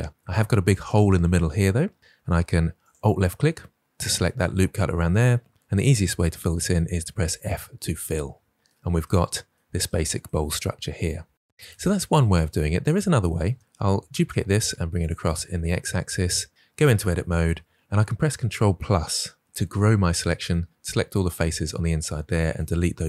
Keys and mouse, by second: 6.7 f, 9.2 Tab, 13.4 Tab, 13.6 Tab, 13.8 shift+d, 14.0 x, 16.0 Tab, 19.4 ctrl+KP_Add, 19.7 ctrl+KP_Add, 19.9 ctrl+KP_Add, 20.1 ctrl+KP_Add, 20.3 ctrl+KP_Add.